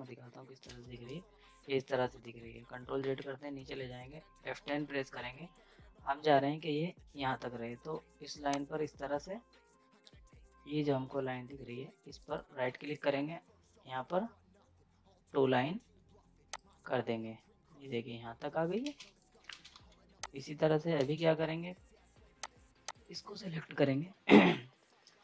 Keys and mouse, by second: 0.6 space, 0.8 Page_Up, 3.0 z, 4.6 F10, 8.5 click, 12.1 right click, 16.5 click, 18.8 ctrl+space, 19.0 z, 19.2 right click, 19.5 space, 19.7 z, 20.2 click, 21.0 ctrl+space, 22.4 click.